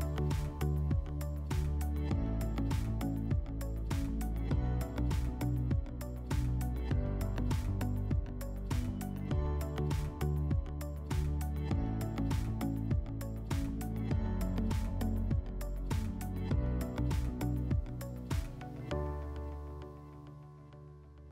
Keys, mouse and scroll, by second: 1.8 click, 5.0 click, 8.0-9.9 drag, 10.0 click, 12.2-21.3 drag.